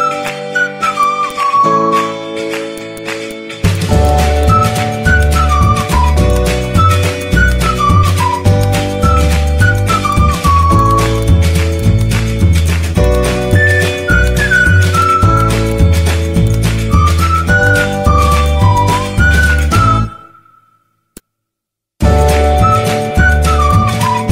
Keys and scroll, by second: 1.7 Delete, 7.8 ctrl+z, 10.0 z, 13.7 z.